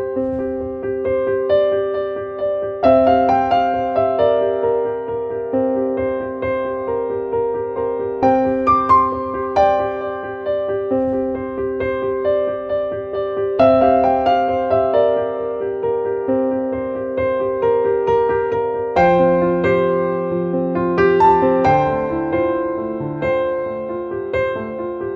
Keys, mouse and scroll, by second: 1.8-4.2 drag, 7.5 click, 8.8 click, 10.7-13.8 drag, 14.9-16.2 drag, 16.8 click, 18.1-20.2 drag, 23.7 click.